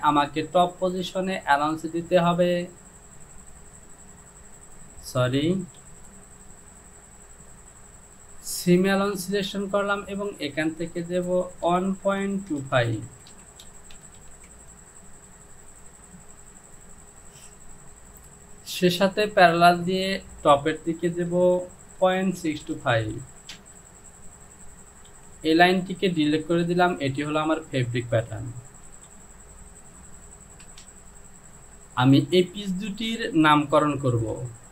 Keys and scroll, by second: 5.8 ctrl+z, 11.7-14.2 typing, 13.0 Down, 14.5 Down, 21.5 Down, 22.0 KP_Decimal, 22.4 KP_6, 22.7 KP_2, 22.9 KP_5, 25.2 Delete, 29.0 j, 30.7 Return, 34.2 e.